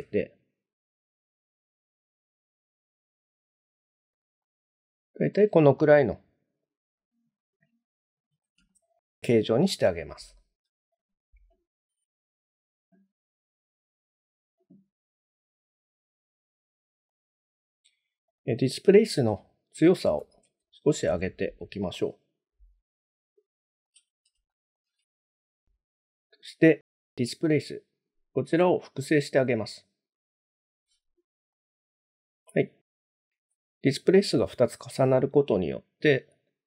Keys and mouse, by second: 0.4 s, 2.7 ctrl+click, 4.5-5.2 middle drag, 5.8-6.1 middle drag, 7.0-8.4 middle drag, 8.7 shift+middle drag, 9.3 middle click, 10.4 shift+click, 11.0 click, 13.8 click, 17.1-18.4 drag, 18.9-21.6 drag, 21.9-23.8 middle drag, 24.5 shift+middle click, 27.6-29.8 drag, 31.5-33.5 middle drag, 35.4-36.0 middle drag, 36.5-36.6 middle drag.